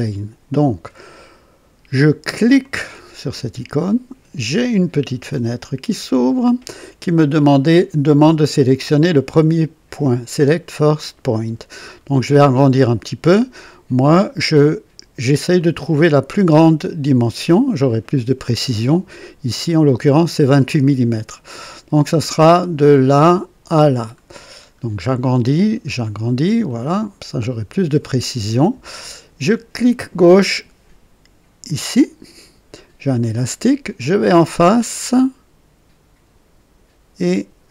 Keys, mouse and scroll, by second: 2.6 click, 4.5-6.4 drag, 11.9-12.2 scroll up 2, 14.1-14.5 scroll down 2, 15.6-17.0 right drag, 24.2-25.1 scroll up 2, 25.1 right click, 26.1 scroll up 1, 26.7-28.1 right drag, 31.7 click.